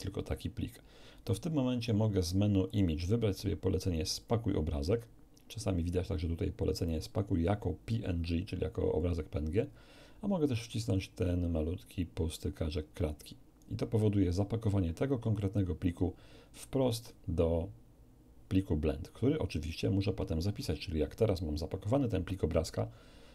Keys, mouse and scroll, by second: 2.6 click, 13.0 click.